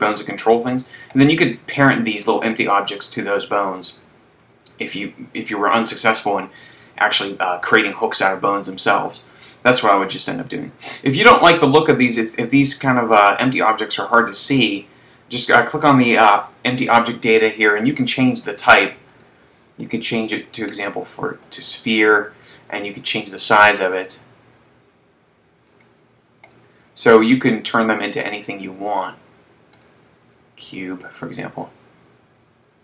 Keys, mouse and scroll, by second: 1.3 right click, 14.7 click, 17.8 click, 19.3 click, 20.0 click, 23.0 click, 26.5 right click, 27.7 click, 31.5 click.